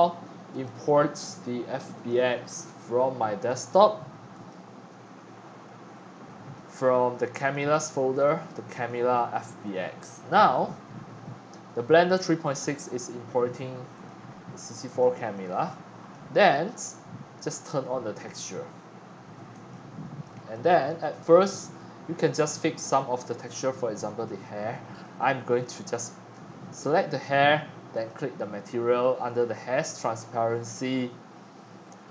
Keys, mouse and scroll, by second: 0.5 click, 1.9 click, 3.4 click, 4.3 click, 4.9 middle click, 7.4 click, 7.6 click, 8.2 click, 8.5 click, 8.7 click, 9.7-11.1 scroll up 8, 12.7 middle click, 13.2 middle click, 13.3-13.6 scroll, 13.9 click, 14.4-15.5 middle drag, 15.5-17.5 shift+right drag, 17.5 click, 17.7 click, 18.7 scroll up 4, 19.6-20.2 drag, 20.5 shift+middle drag, 21.5-22.2 middle drag, 23.6-24.5 drag, 25.0-27.0 drag, 28.1 click, 29.1-29.5 drag, 29.5-30.1 middle drag, 30.1-32.1 scroll down 22.